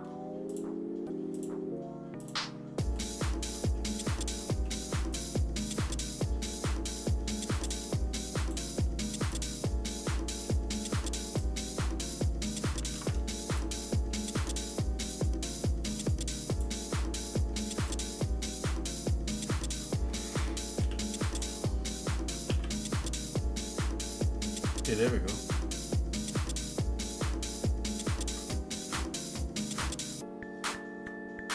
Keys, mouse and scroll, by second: 0.5 shift+click, 1.4 shift+click, 2.2 shift+click, 3.0 shift+middle click, 4.1 scroll down 1, 4.5 middle click, 5.2 shift+click, 6.6 shift+click, 7.6 shift+click, 8.4 shift+click, 9.4 shift+click, 10.1 shift+middle click, 10.1 shift+click, 11.4 shift+click, 12.2 shift+click, 12.9 ctrl+z, 13.5 shift+click, 13.8 shift+middle click, 15.1 shift+click, 16.6 shift+click, 18.0 shift+click, 18.2 shift+middle click, 19.3 shift+click, 20.9 e, 22.5 alt+s.